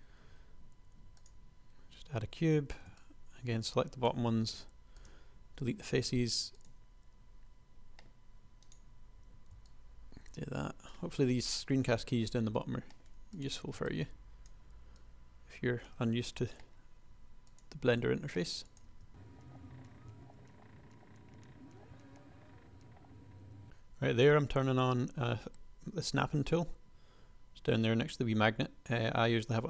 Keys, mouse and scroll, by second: 2.7 a, 4.3 x, 6.1 ctrl+r, 9.3 a, 12.6 g, 13.7 a, 16.3 g, 18.1 s, 19.1 ctrl+r, 19.3-22.8 typing, 21.2 click, 22.6 click, 23.1 click, 23.4-29.6 drag.